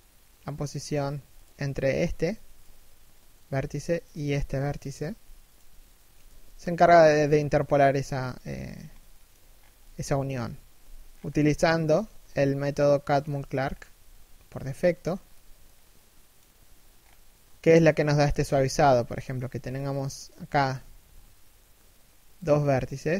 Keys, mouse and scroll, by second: 0.6 g, 3.9 right click, 4.0 g, 5.9 z, 6.0 middle click, 6.4 z, 7.8 KP_1, 8.5 scroll down 1, 8.7 shift+middle click, 9.1 scroll down 1, 9.4 middle click, 9.8 KP_1, 10.7 scroll down 1, 10.9-11.5 scroll up 1, 16.5-16.9 scroll up 1, 16.9 shift+middle click, 18.0 scroll up 1, 18.8 shift+middle click, 19.2-19.5 scroll up 1, 19.5 right click, 20.3 shift+right click, 20.5 g, 22.5 middle click.